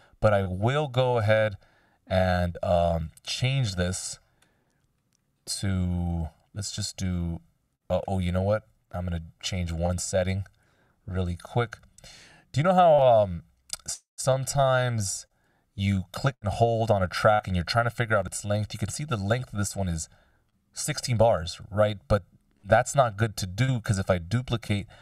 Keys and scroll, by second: 3.8 F16, 8.4 super+z, 10.5 super+z.